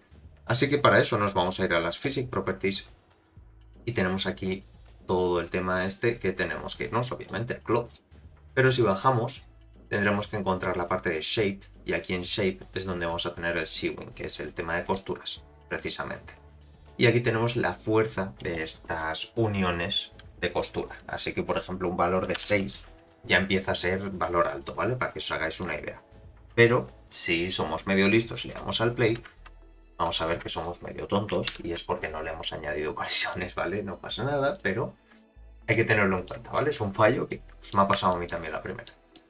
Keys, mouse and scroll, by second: 2.0 click, 7.2 click, 7.9-10.0 scroll down 41, 11.0 click, 11.0 scroll down 7, 12.2 click, 12.6-14.6 scroll down 2, 14.6-14.9 scroll down 1, 14.9 click, 18.5-23.2 drag, 24.6-25.3 scroll down 1, 25.3-25.6 middle drag, 25.3-25.6 scroll down 5, 29.2 space, 30.4 space, 31.5 shift+Left, 33.2 click, 34.5 click, 35.7-36.4 middle drag, 36.6-37.3 scroll up 2, 37.3-37.7 middle drag, 37.3 scroll up 2, 38.1 shift+middle drag, 38.4-38.9 middle drag, 39.1-39.2 middle drag.